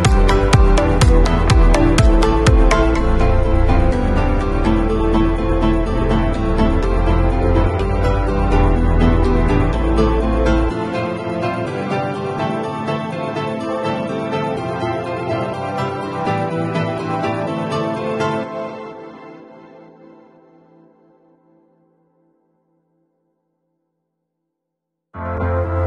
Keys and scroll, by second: 2.1 [, 10.0 v, 12.5 space.